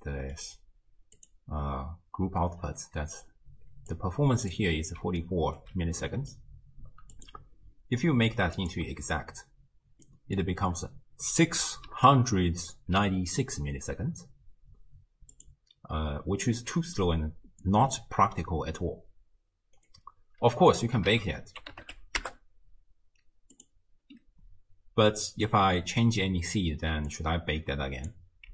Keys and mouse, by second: 3.7-5.7 typing, 4.0 click, 5.2 click, 6.1 middle drag, 7.1-9.4 drag, 10.1-10.4 middle drag, 11.9-13.6 typing, 12.1 click, 15.4-19.6 drag, 19.8-20.2 drag, 20.7 click, 21.1 ctrl+a, 27.1-28.1 drag.